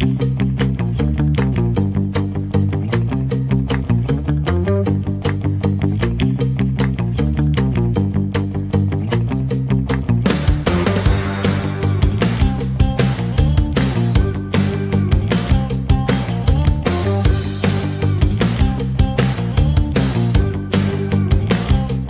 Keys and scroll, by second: 14.5 shift+Page_Down, 15.1 ctrl+Page_Up, 21.0 KP_Add.